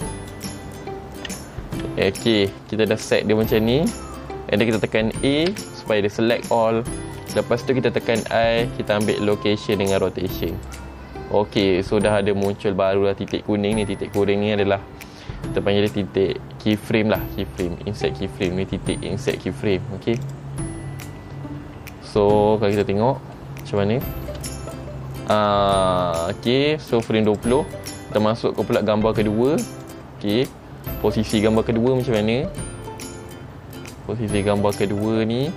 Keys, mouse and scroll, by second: 2.9 middle click, 5.7 a, 8.4 i, 20.4 click, 21.0-21.5 scroll down 1, 22.9 click, 23.5 middle click, 24.4 space, 25.5 space, 27.4 click, 30.0 click, 30.5-30.9 scroll up 2.